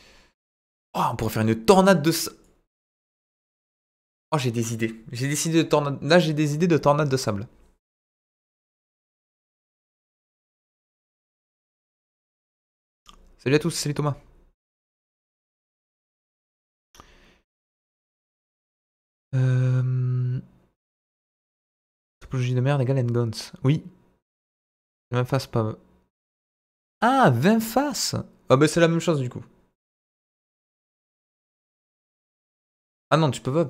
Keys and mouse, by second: 2.5-4.0 drag.